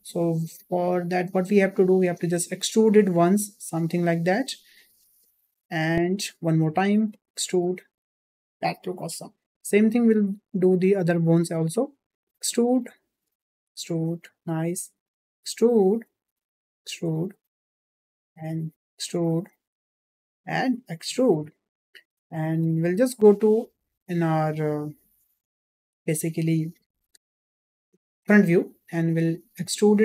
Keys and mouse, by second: 0.2 click, 1.4 click, 2.6 e, 6.6 e, 9.8 e, 11.8 e, 13.8 click, 14.2 e, 16.0 e, 18.1 click, 18.3 e, 19.6 e, 25.1-26.5 drag, 29.5 e.